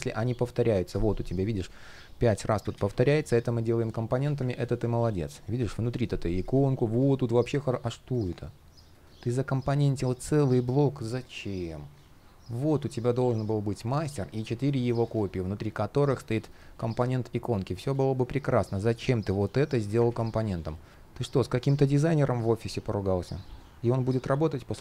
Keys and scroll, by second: 0.1 shift+p, 0.9 alt+shift+l, 2.4 super+z, 2.7 shift+o, 16.1 shift+p, 19.7 super+z.